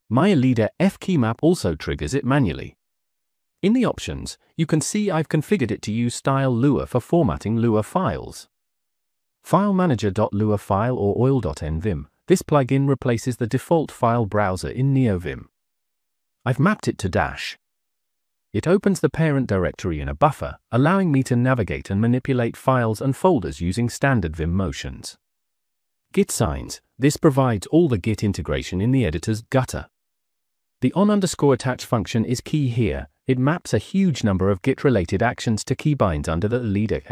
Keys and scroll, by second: 0.5-6.4 typing, 7.1 Escape, 7.3 Escape, 8.0 Escape, 8.4 -, 8.8 j, 9.0 Return, 10.9 j, 11.1 j, 13.4-13.8 typing, 15.8 -, 16.8 -, 17.2 Return, 17.8 -, 17.9 -, 18.3 Return, 18.4 Return, 20.5-22.6 typing, 22.6 Return, 24.2 space, 24.5 j, 24.7 Return, 26.4-27.5 typing, 28.9 k, 29.1 k, 29.5 k, 32.5-34.2 typing, 36.1-37.1 typing.